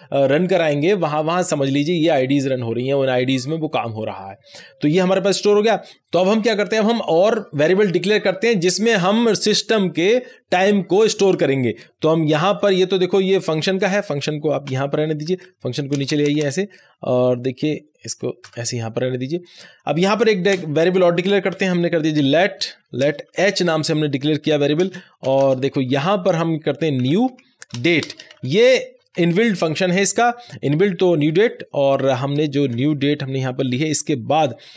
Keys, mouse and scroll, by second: 12.4 click, 14.6 ;, 15.2 BackSpace, 15.9 Return, 18.4 Tab, 19.4 click, 20.4 Return, 21.3-23.3 typing, 24.8 space, 25.2 =, 25.4 space, 26.8-29.6 typing, 32.1-33.1 typing, 33.6 Right.